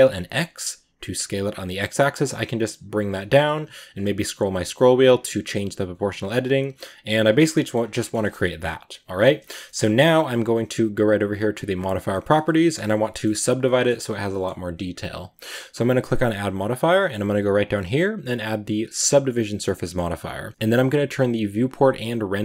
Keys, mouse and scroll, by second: 7.2 Tab, 7.4 middle drag, 7.6 scroll down 2, 7.8-9.2 middle drag, 9.2 scroll up 1, 9.2-12.1 shift+middle drag, 12.1 scroll up 2, 12.3-19.1 middle drag, 19.2-20.5 middle drag, 20.5-22.4 drag.